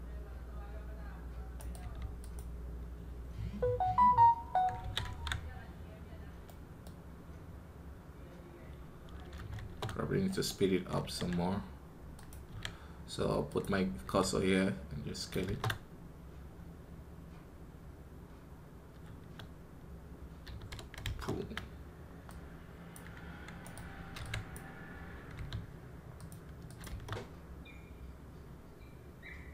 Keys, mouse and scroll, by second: 1.4 right click, 10.1-23.6 right drag.